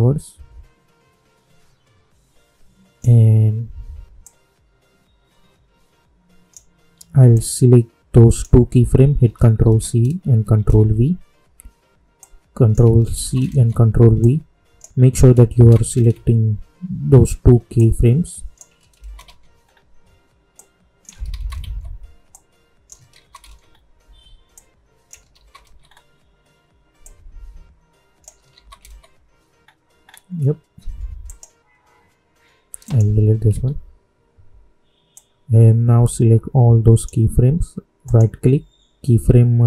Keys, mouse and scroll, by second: 9.5 ctrl+c, 12.1 click, 13.1 ctrl+c, 14.1-15.5 drag, 15.5 ctrl+c, 17.7 click, 18.9 ctrl+c, 19.6-20.5 scroll down 1, 20.5 click, 21.2 ctrl+c, 22.3 click, 23.1 ctrl+c, 23.6-24.5 scroll down 1, 24.5 click, 25.3 ctrl+c, 25.8-27.0 scroll down 1, 27.0 click, 28.5 ctrl+c, 29.6-29.9 scroll down 1, 31.2 click, 35.1-38.0 drag, 38.0 right click.